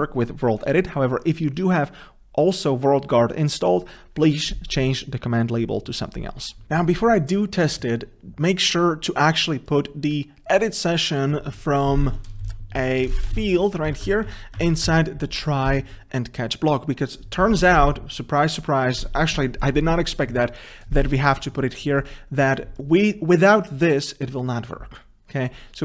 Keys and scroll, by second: 6.7 ctrl+F2, 12.5 ctrl+c, 13.7 ctrl+v, 14.2 ctrl+z, 14.9 ctrl+z.